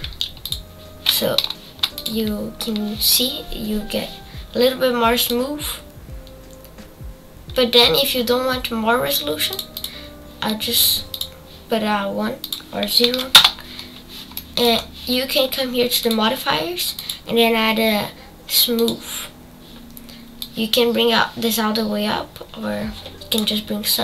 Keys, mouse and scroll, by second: 3.1 scroll up 2, 7.8-11.8 drag, 13.6 click, 14.3 middle click, 14.7-16.9 scroll down 4, 19.1-24.0 drag.